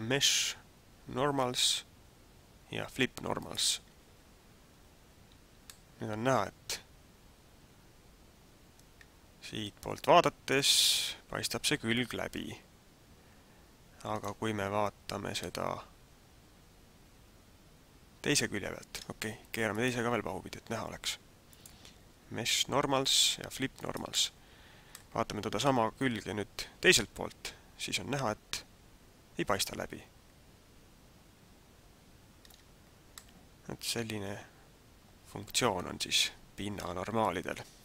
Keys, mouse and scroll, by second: 5.7 middle click, 15.4 middle click, 19.7 right click, 21.5 click, 24.9 middle click, 33.2 middle click.